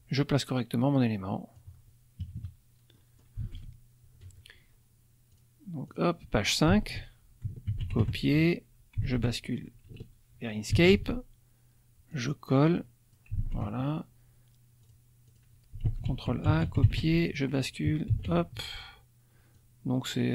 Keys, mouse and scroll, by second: 2.1 KP_Subtract, 2.9 click, 3.5 alt+Tab, 5.2 click, 5.8 click, 6.7 ctrl+a, 7.7 ctrl+c, 9.2 alt+Tab, 10.7 ctrl+v, 12.0-13.2 drag, 13.4 alt+Tab, 14.8 click, 15.2 click, 15.8 ctrl+a, 16.4 ctrl+c, 16.9 ctrl+alt+Tab, 17.5 click, 18.1 ctrl+v, 19.5-20.3 drag.